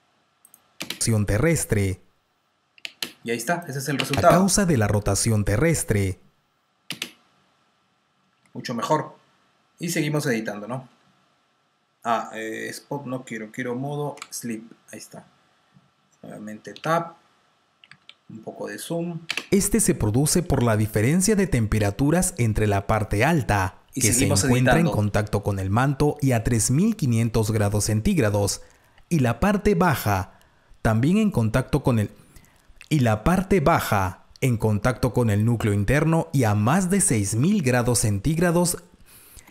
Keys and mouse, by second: 0.4 click, 0.7 space, 3.2 space, 3.5 click, 3.9 space, 7.9 typing, 9.4 typing, 10.8 click, 14.1 F2, 16.6 Tab, 17.7 t, 18.3 t, 19.2 space, 20.6 r, 24.9 r, 26.3 click, 27.7 t, 30.3-31.1 typing, 35.3 click, 39.4 F1.